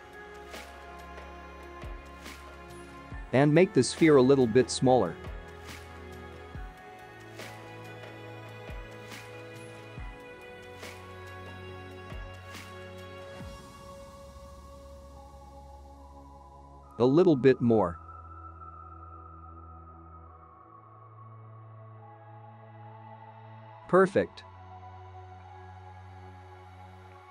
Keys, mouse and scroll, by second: 2.0 space, 5.2 space, 9.4 click, 10.3 click, 11.3 s, 13.7 click, 14.2 click, 15.9 space, 17.3 space, 18.4 click, 19.2 click, 19.9 click, 20.8 s, 22.3 click, 23.0 space, 25.0 click.